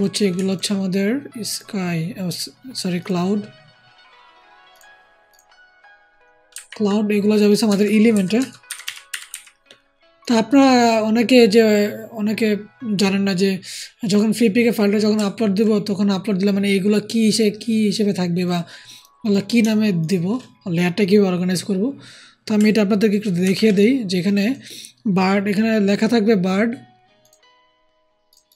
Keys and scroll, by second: 6.4 ctrl+g, 8.0-9.2 typing, 23.3 ctrl+g.